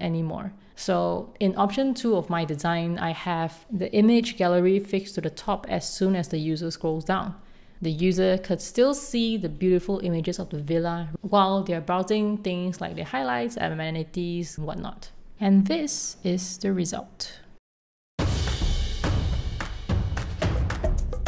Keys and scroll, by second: 1.4 alt+super+v, 4.0 r, 5.0 r.